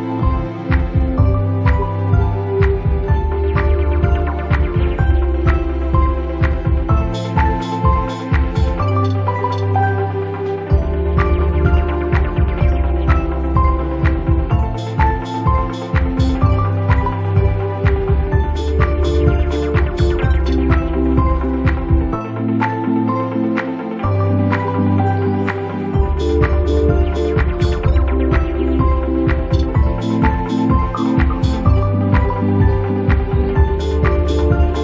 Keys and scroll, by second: 1.4 ctrl+z, 2.5 space, 6.1 space, 6.7 space, 8.6 space, 13.2 space, 16.8 space, 18.6 space.